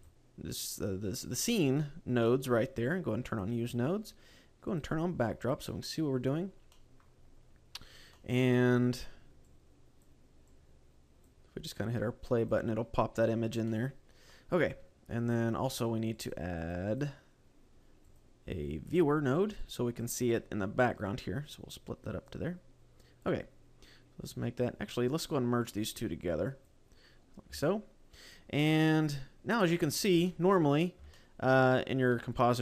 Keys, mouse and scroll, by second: 16.2 ctrl+x, 16.2 typing.